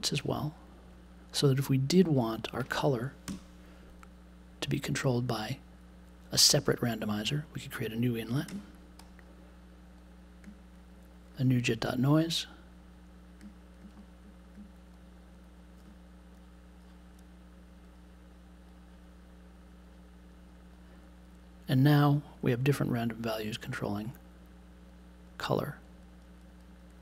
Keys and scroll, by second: 3.2 BackSpace, 8.3 space, 8.4 2.